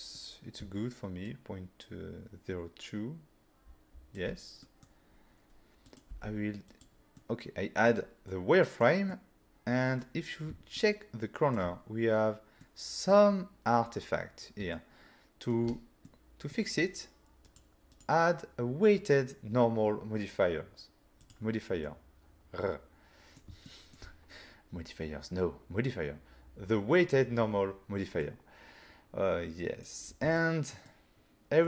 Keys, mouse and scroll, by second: 1.3 shift+click, 4.6 middle click, 5.9 click, 6.1 f, 6.8 click, 7.2 middle click, 8.3 middle click, 9.1 middle click, 10.8 ctrl+middle click, 12.6 middle click, 14.8 ctrl+middle click, 16.1 middle click, 17.5 click, 17.9 click, 18.1 double click, 21.2 double click, 21.9 middle click, 23.7 shift+middle click, 30.4-30.9 ctrl+scroll up 1.